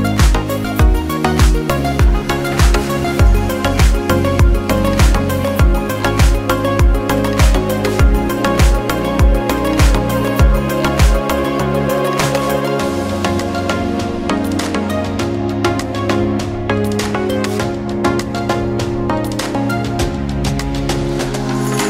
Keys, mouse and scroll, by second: 2.4 click, 4.0 scroll down 1, 5.0 click, 8.6 click, 9.3-9.9 scroll down 1, 10.7 click, 15.1 click, 19.3 click.